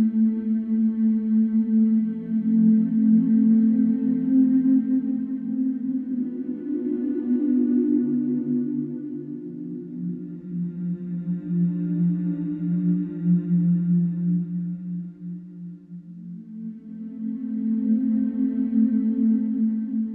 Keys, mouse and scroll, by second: 0.8 middle click, 2.2 click, 4.3 click, 5.4 click, 6.5 click, 8.8 click, 10.1 click, 11.3 click, 12.6 click, 13.8 click, 17.4 F3, 17.9 click, 19.1 right click, 19.6 click.